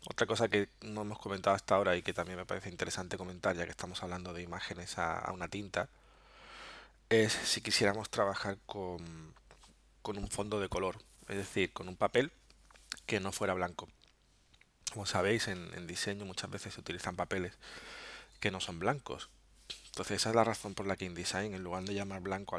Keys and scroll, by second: 21.9 alt+super+0.